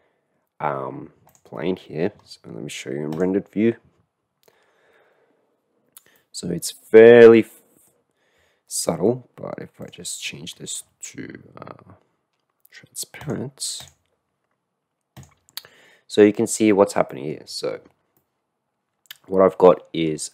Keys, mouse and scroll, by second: 1.3 click, 6.1-7.9 middle drag, 13.2 click, 13.8 drag, 15.1 click, 17.1 middle click, 18.1-19.1 middle drag, 19.8 middle click.